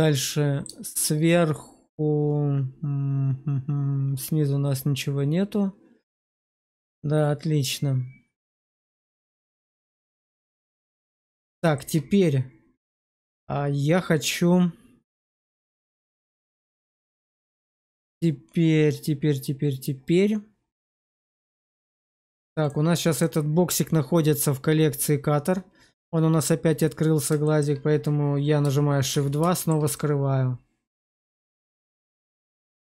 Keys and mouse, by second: 0.8 shift+middle click, 1.4-9.9 middle drag, 10.1 shift+middle click, 11.0 middle click, 11.7 shift+middle click, 12.7-17.1 middle drag, 17.5 shift+middle click, 20.8 middle click, 21.7 middle click, 27.3 shift+middle click, 29.0 shift+2, 29.4 shift+middle click, 29.8-32.8 middle drag.